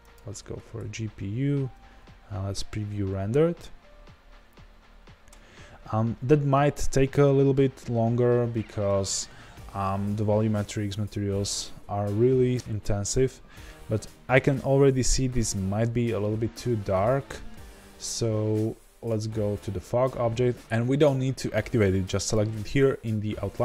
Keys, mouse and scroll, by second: 1.8 z, 4.5-5.4 scroll down 1.